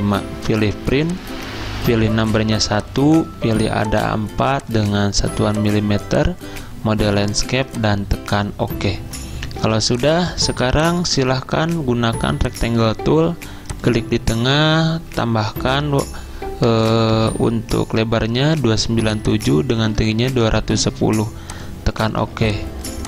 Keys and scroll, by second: 9.6 z, 10.7 2, 16.9-17.7 typing, 20.0-22.2 typing.